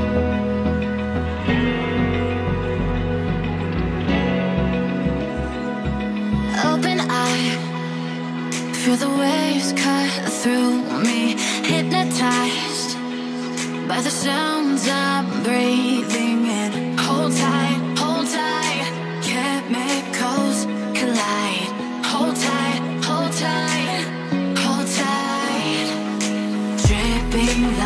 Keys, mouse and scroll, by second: 5.0 scroll down 1, 5.3 middle click, 8.4-8.9 scroll up 4, 8.9 scroll down 1, 9.2 middle click, 12.0 double click, 16.9-18.3 scroll up 2, 18.3 scroll up 1, 18.3 Escape, 18.7 Escape, 23.2 double click.